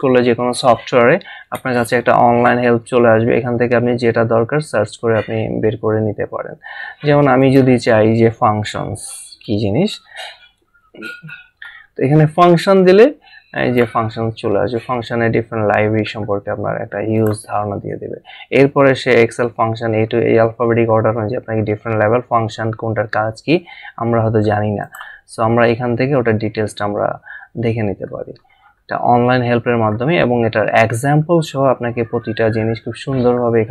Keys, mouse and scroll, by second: 1.5 F1, 7.4 click, 9.6-10.3 typing, 11.4-12.3 typing, 13.6 click, 15.4 scroll down 1, 16.3-17.2 scroll up 1, 17.2 click, 19.0-19.4 scroll down 1, 24.8 click, 27.7 scroll down 1.